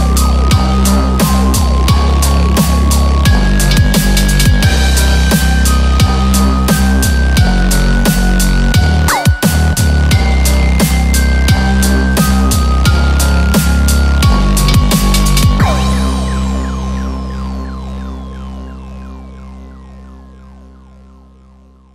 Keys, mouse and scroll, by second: 0.0-2.4 typing, 0.3 click, 0.4 click, 1.2 click, 2.2 click, 2.3 click, 3.9 g, 5.2 click, 6.1 click, 6.2 g, 7.0 click, 7.1 g, 7.2 g, 8.4 click, 8.4 g, 8.5 g, 10.4 click, 10.6 g, 11.0 scroll down 1, 11.1 shift+middle click, 11.1 click, 11.1-11.9 scroll up 3, 11.9 g, 13.3 click, 13.4 g, 14.5 click, 14.5 g, 16.3 click, 16.4 click, 16.4 shift+middle click, 16.4 scroll down 1, 16.4 g, 16.5 g, 17.3-17.8 scroll down 1, 17.9 shift+middle click, 18.4 click, 18.7 g, 18.8 shift+middle click, 18.8 scroll down 1, 20.1 shift+middle click, 20.3 click, 20.3 scroll up 1, 20.3 g, 20.3 g.